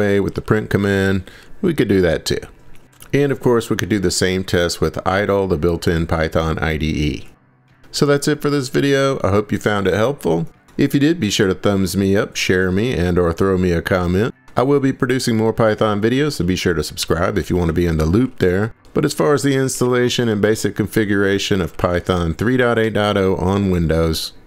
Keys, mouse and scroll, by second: 0.0-2.5 typing, 2.5 Left, 2.6 Left, 2.9 Return, 4.0 click, 5.3-6.0 scroll, 6.4 scroll, 7.2-8.2 scroll, 8.2 click, 9.3 click, 14.5 click, 15.0 click, 15.9-23.3 typing, 18.5 Return, 23.5 Return.